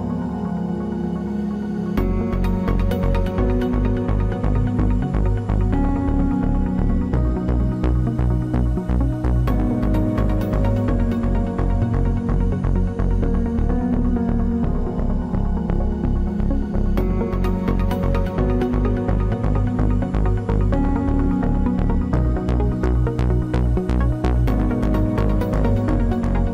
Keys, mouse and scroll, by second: 6.3 c, 7.3-8.8 middle drag, 7.3 z, 7.7-9.2 right drag, 8.4 click, 9.9 KP_3, 10.2 Tab, 11.2 ctrl+s, 11.5 z, 13.1 Tab, 13.9 click, 14.8 c, 17.8 ctrl+Tab, 20.2 g, 21.5-23.8 right drag, 21.7 g, 23.8 g, 24.1-25.8 right drag, 24.2 g, 25.3 g.